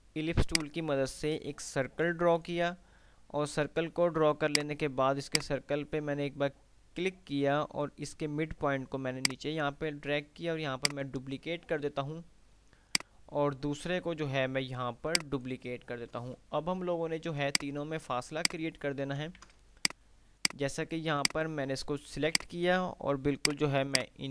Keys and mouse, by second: 10.9 ctrl+right click, 13.1-15.6 drag, 15.2 ctrl+right click, 17.4 click, 19.6 ctrl+z, 20.1 click.